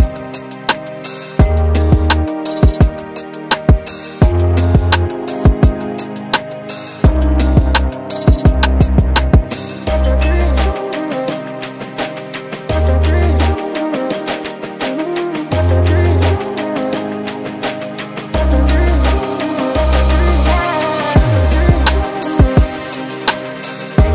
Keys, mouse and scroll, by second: 0.3 right click, 1.4 click, 2.8 click, 3.6 click, 4.2 click, 5.7 click, 6.4 alt+click, 6.8 alt+middle click, 7.0-7.4 scroll up 3, 7.4 alt+middle click, 7.7-8.3 alt+drag, 8.8-9.5 scroll up 4, 10.0 click, 10.9 click, 11.8 click, 15.8 click, 16.3-17.6 typing, 17.9 scroll up 1, 18.2 alt+middle click, 18.5 scroll up 2, 18.7 alt+click, 19.4 scroll down 2, 19.7 alt+click, 20.1 alt+middle click, 20.6 scroll down 2, 20.9-21.3 scroll up 3, 21.4 alt+middle click, 21.8 scroll down 2, 22.2 alt+middle click, 23.3 scroll down 2.